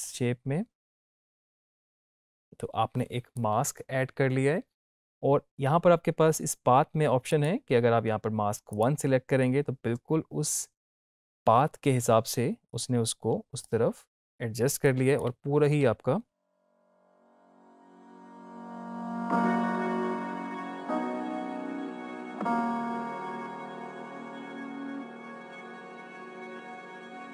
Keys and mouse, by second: 7.2 click, 12.6-15.8 drag, 15.8 space.